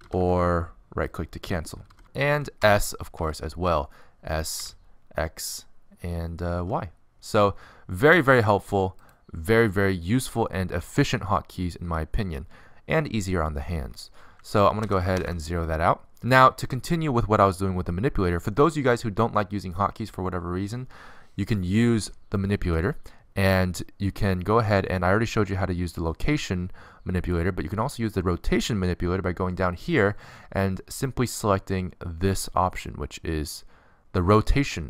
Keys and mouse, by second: 0.8 r, 4.0 s, 6.3 alt+r, 6.7 s, 8.7 s, 10.3 s, 16.0 alt+r, 16.1 alt+g, 17.6 alt+s.